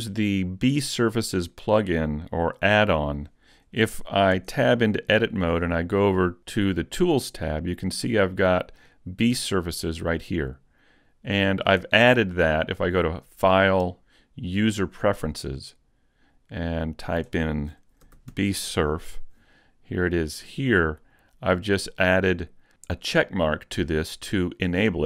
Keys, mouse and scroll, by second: 4.3 Tab, 9.6 click, 13.0 click.